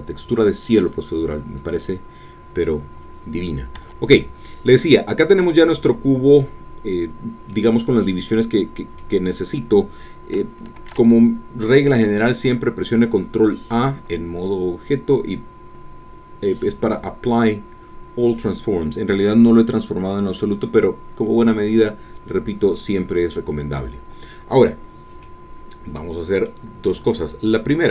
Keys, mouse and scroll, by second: 3.8 Tab, 4.1 click, 4.3 scroll down 1, 6.7-7.0 scroll up 1, 7.0-7.5 scroll down 1, 7.5-10.3 middle drag, 10.7 ctrl+a, 18.3-25.2 drag, 25.2-26.6 middle drag.